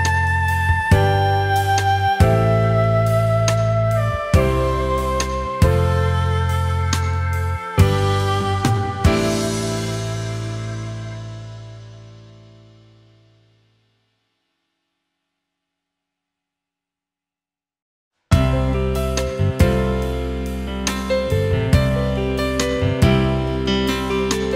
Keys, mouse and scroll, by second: 1.9-2.4 alt+scroll up 1, 3.0-3.4 alt+scroll down 1, 3.6-4.0 alt+scroll down 1, 4.0 space, 4.9 Tab, 5.3 space, 6.0 alt+scroll up 1, 6.2 space, 7.4 Tab, 13.0 alt+scroll up 1, 13.2 space, 23.3 alt+scroll up 1, 23.4 space, 24.2-24.5 alt+scroll up 1.